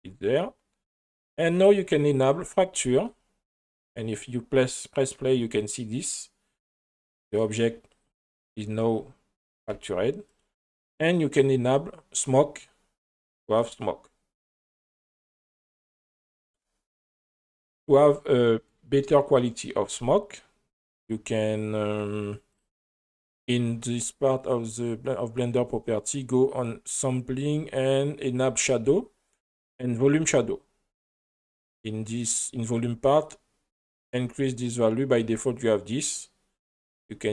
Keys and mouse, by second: 2.0 click, 3.5 space, 9.7 g, 12.3 click, 16.6 space, 17.0 right click, 18.5-19.7 middle drag, 22.5 click, 23.5 click, 31.4 click, 32.7 click, 34.0-35.3 drag, 36.9-37.3 drag.